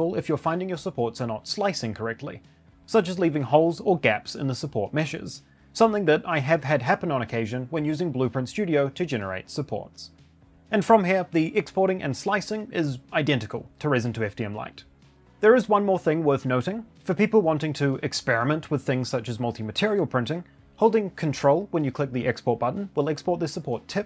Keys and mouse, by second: 15.0 middle click, 21.8 ctrl+click.